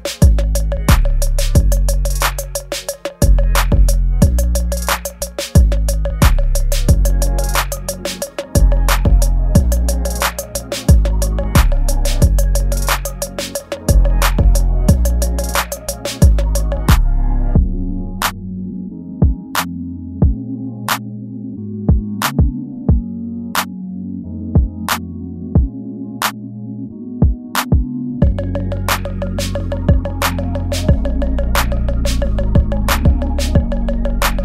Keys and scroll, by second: 0.3 space, 1.0 space, 1.5 space, 2.1 ctrl+z, 2.6 ctrl+z, 3.0 space, 4.5 ctrl+z, 6.4 space, 12.0 space, 13.2 space, 13.9 space, 14.0 ctrl+z, 14.6 space, 14.8 ctrl+z, 16.9 space, 18.1 ctrl+z, 18.9 ctrl+z, 22.0 space, 24.5 space, 24.9 space, 25.9 space, 29.3 space, 30.7 ctrl+z, 32.3 space, 34.3 space.